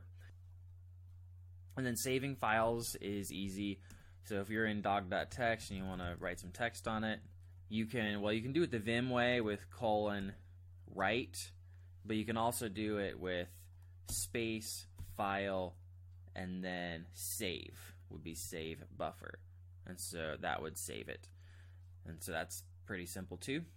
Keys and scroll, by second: 0.2 alt+Tab, 2.6 ctrl+j, 2.8 ctrl+j, 3.2 ctrl+j, 3.8 Return, 5.0-6.7 typing, 6.8 Escape, 14.1 space, 14.9 f, 18.3 s.